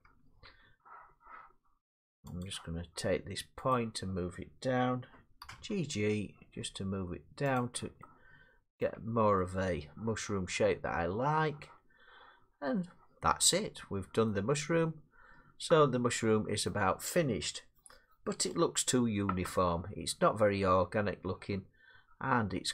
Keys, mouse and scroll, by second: 0.0 Tab, 0.5 Tab, 2.4 click, 3.7 click, 5.4 g, 5.6 g, 7.6 click, 8.8 middle click, 9.0 Tab, 14.3 middle click, 16.7 middle click, 19.3-21.8 middle drag.